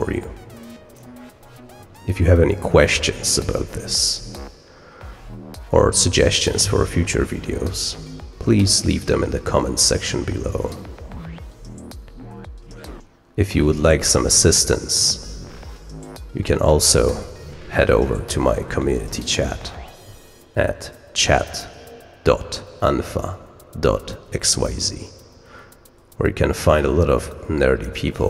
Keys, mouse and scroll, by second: 19.6 scroll up 2, 20.7 click.